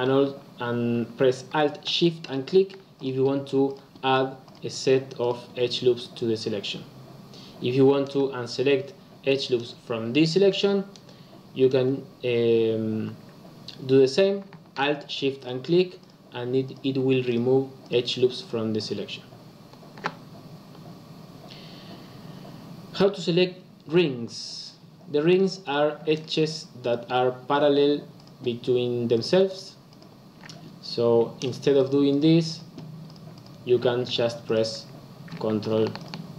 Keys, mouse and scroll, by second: 2.2 alt+shift+click, 2.9 alt+shift+click, 3.6 alt+shift+click, 4.4 alt+shift+click, 5.1 alt+shift+click, 5.9 alt+shift+click, 15.3 alt+shift+click, 15.9 alt+shift+click, 16.6 alt+shift+click, 17.2 alt+shift+click, 17.8 alt+shift+click, 18.4 alt+shift+click, 18.7 alt+shift+click, 25.5 click, 26.0 shift+click, 26.8 shift+click, 28.1 shift+click, 29.1 shift+click, 29.4 shift+click, 29.8 shift+click, 31.3 click, 31.7 shift+click, 32.0 shift+click, 32.4 shift+click, 33.0 shift+click, 33.3 shift+click, 34.4 click, 35.9 ctrl+alt+click.